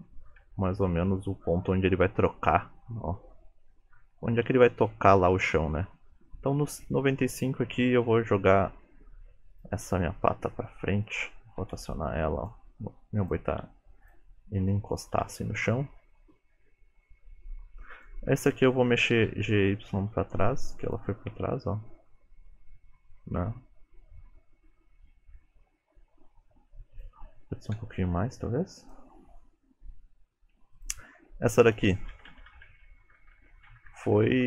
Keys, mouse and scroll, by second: 0.0 Right, 0.5 Right, 1.1 Left, 2.1 Left, 2.4 Right, 2.8 Left, 3.1 Right, 3.4 Left, 3.6 Right, 3.9 Left, 4.2 Right, 4.6 Left, 5.1 Right, 5.5 Left, 9.6 click, 10.4 g, 11.7 r, 12.8 g, 13.6 r, 14.6 g, 15.2 r, 18.0 click, 19.3 g, 21.7 click, 27.8 g, 30.8 click, 32.2 Left, 32.4 Left, 32.5 Left, 32.7-33.3 Left, 33.4 Left, 33.8 Right, 33.9 Right, 34.2 Right, 34.3 Right.